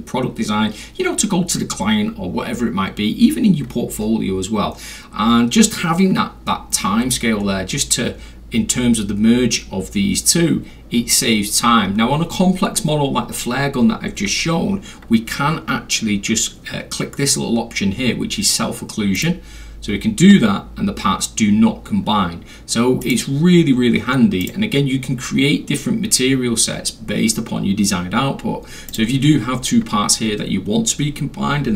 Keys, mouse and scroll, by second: 7.4 scroll up 1, 7.5 middle click, 7.5 scroll, 19.2 click, 23.0 click, 24.4 click, 28.9 click.